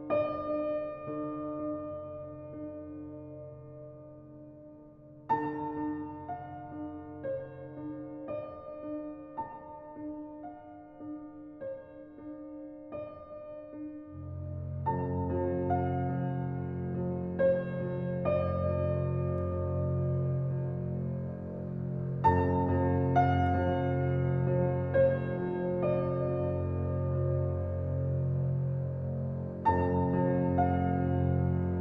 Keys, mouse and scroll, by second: 0.4-3.2 drag, 3.7-9.4 drag, 9.4-11.0 alt+right drag, 11.0 alt+click, 15.9 alt+click, 21.6 click, 28.2 ctrl+alt+z, 31.6 ctrl+alt+z.